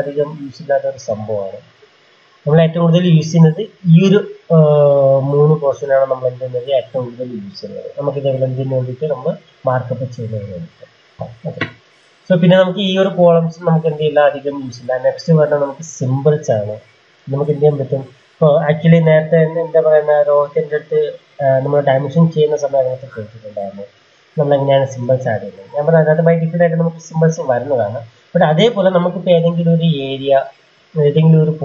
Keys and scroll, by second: 22.8 ctrl+a, 24.4 BackSpace, 28.5-29.4 typing.